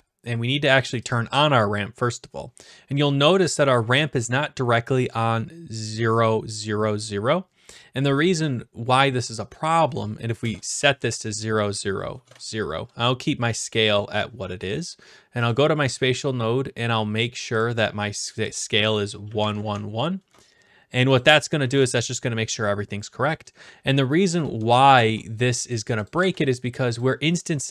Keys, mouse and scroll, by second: 1.1 click, 9.7 click, 10.4 0, 10.6 Return, 11.8-12.9 drag, 12.2 Return, 15.5 click, 16.8-17.5 scroll down 1, 17.5-17.9 scroll down 1, 17.9 click, 18.4 click, 19.3 1, 19.4 Tab, 19.4 1, 19.6 Tab, 19.6 1, 20.1 Return, 22.2 click, 22.2 1, 24.7 ctrl+s, 25.7 click, 26.1 click, 26.2 ctrl+s, 27.0 click.